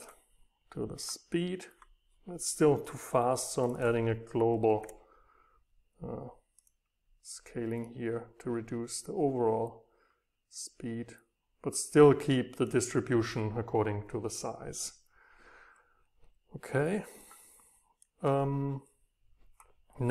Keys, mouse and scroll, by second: 0.1-2.1 drag, 3.7 click, 4.7 double click, 6.9-9.5 drag, 10.2-11.9 right drag, 12.2-14.4 right drag, 17.9-20.1 right drag.